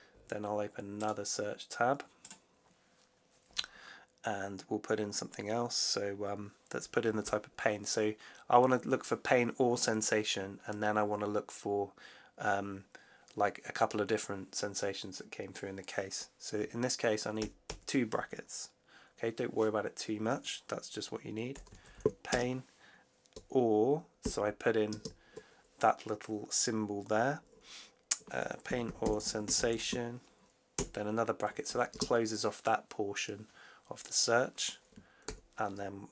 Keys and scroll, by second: 17.3 shift+9, 21.2-22.3 typing, 24.1 shift+\, 24.8 shift+space, 28.4-30.6 typing, 31.8 space, 35.1 shift+9.